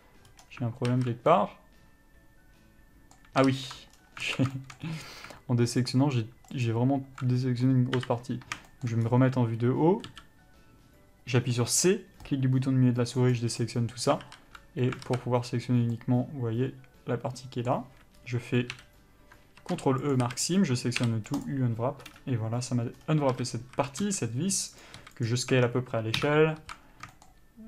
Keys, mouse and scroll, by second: 0.1-0.7 scroll up 1, 0.7-1.1 scroll down 1, 1.1 alt+z, 1.6 middle click, 3.7 ctrl+z, 4.2 scroll down 1, 4.5 alt+a, 4.8 shift+middle click, 5.1 scroll up 1, 6.1 alt+click, 7.5 scroll down 1, 8.2 KP_7, 8.9 shift+middle click, 9.3 scroll up 1, 12.5 c, 13.8 middle click, 14.2 scroll down 1, 14.5 alt+z, 16.2 middle click, 20.4 ctrl+e, 20.5 a, 21.8 u, 23.2 scroll down 1, 23.6 a, 24.3 s, 25.0 click, 25.2 s, 25.8 Tab, 26.4 KP_Divide, 26.8 alt+z, 27.4 shift+middle click.